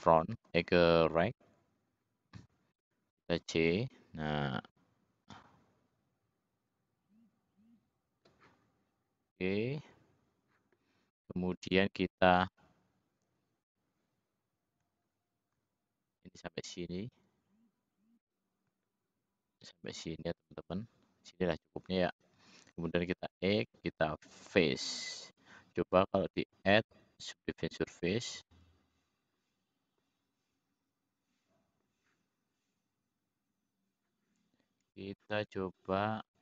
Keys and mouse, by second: 0.2 `, 1.8 click, 2.7 c, 14.8 shift+click, 18.7-20.1 shift+drag, 23.2 x, 26.4 click.